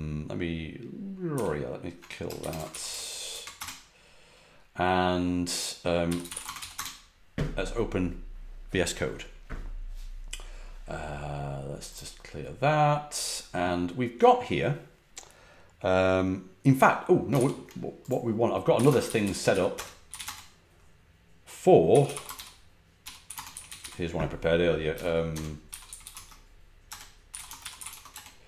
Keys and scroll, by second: 1.3 ctrl+d, 2.2-3.2 typing, 3.5 Return, 5.7-7.2 typing, 17.3 super+q, 18.4-20.6 typing, 21.6-28.4 typing.